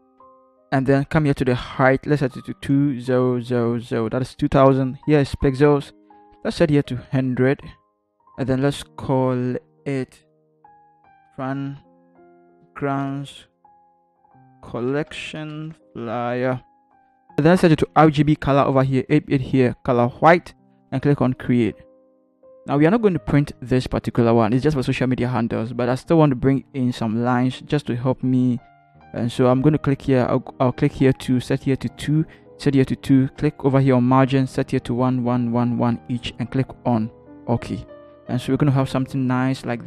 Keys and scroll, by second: 3.0-3.8 typing, 7.6 typing, 10.6-16.3 typing.